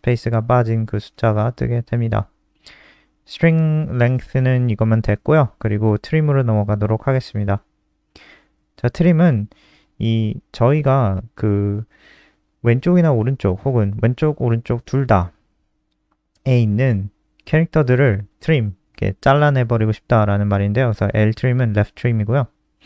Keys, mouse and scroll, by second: 3.6 click, 5.9 shift+Home, 6.1 shift+Up, 7.3 click, 7.6-7.9 scroll down 2, 9.8 click, 12.1-13.2 scroll down 1, 15.4 ctrl+Right, 15.6 ctrl+Right, 15.7 ctrl+Right, 22.1 click.